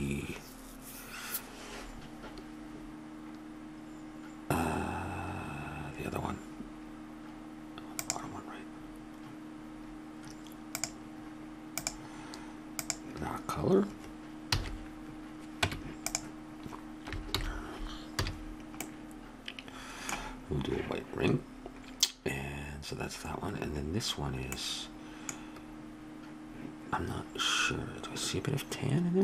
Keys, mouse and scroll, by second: 8.0-9.8 drag, 10.8-12.5 drag, 12.8-14.4 drag, 14.5 a, 15.7 Tab, 17.3 alt+h, 18.2 a.